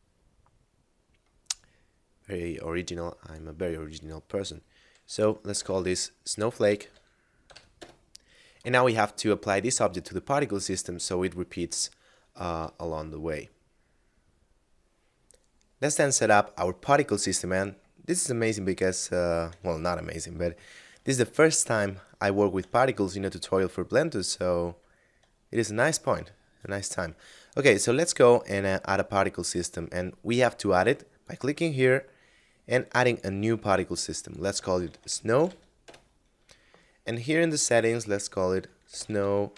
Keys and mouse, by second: 1.9 middle click, 3.3 click, 5.0-7.5 typing, 7.7 Return, 12.9 middle click.